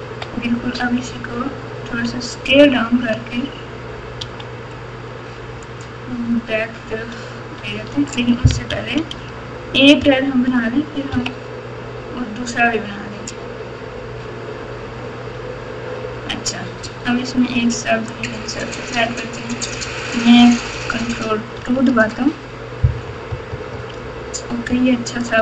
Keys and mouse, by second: 0.1 KP_Subtract, 1.0-1.9 ctrl+KP_6, 4.1 s, 8.7 KP_4, 8.9 KP_4, 9.1 KP_4, 10.0 KP_Add, 10.5 KP_Add, 11.1 KP_3, 16.4 Tab, 16.8 Tab, 18.2-19.7 drag, 21.6 ctrl+2, 23.0 KP_4, 23.2 KP_4, 23.5 KP_4, 23.7 KP_4, 24.7 KP_Add, 25.2 KP_Add.